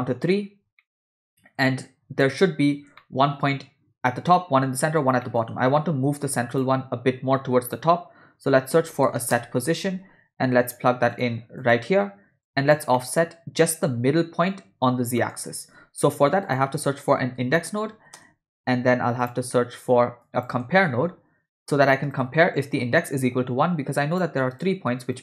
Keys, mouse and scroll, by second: 0.8-1.3 middle drag, 2.2-2.6 ctrl+middle drag, 3.0 shift+middle click, 5.2 middle click, 5.6 shift+a, 12.4 click, 12.9 middle click, 15.2 middle click, 15.6 shift+a, 20.2 click, 20.7 shift+a, 25.1-25.2 drag.